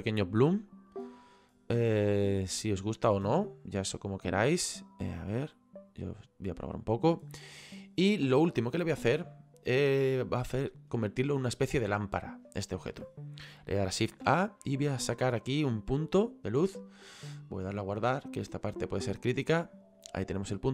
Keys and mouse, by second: 1.0 click, 2.5 click, 5.6 click, 9.3 click, 16.2 click, 17.8 click, 19.0 click, 20.3 click.